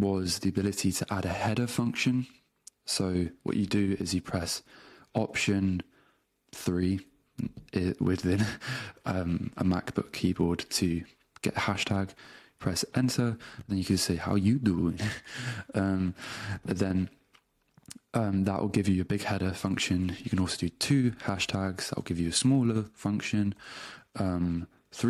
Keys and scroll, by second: 6.5 alt+3, 12.9 space, 14.1-16.3 typing, 19.9 Return, 20.7 alt+3, 21.3 space, 22.1 w, 22.3 space, 23.9 Return, 24.9 alt+3.